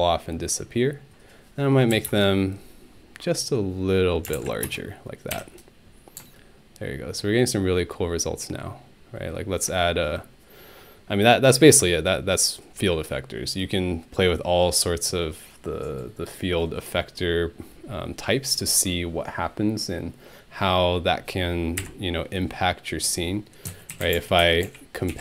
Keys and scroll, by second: 1.9 1, 2.1 Return, 4.0-4.9 typing, 5.3 Home, 21.8 Delete, 23.5-25.2 typing.